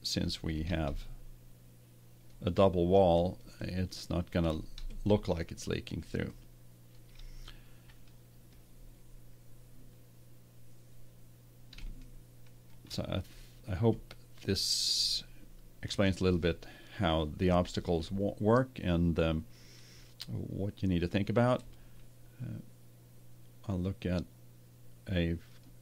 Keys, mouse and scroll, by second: 11.4-13.7 middle drag.